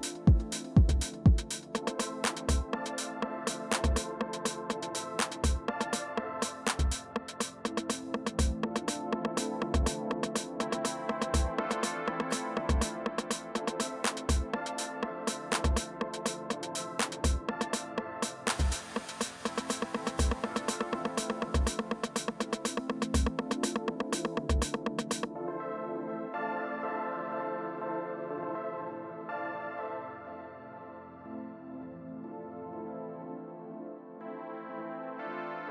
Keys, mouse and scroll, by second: 2.5 ctrl+c, 7.6-9.2 drag, 10.4-12.0 drag, 13.3-14.7 drag, 15.6-18.0 drag, 18.3 alt+Tab, 21.4-26.3 typing, 27.3-33.7 typing.